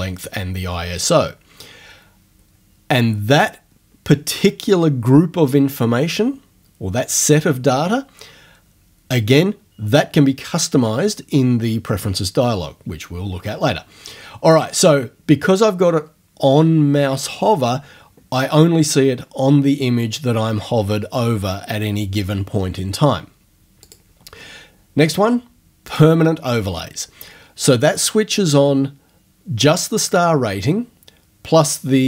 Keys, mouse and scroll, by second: 23.8 click, 25.9 click.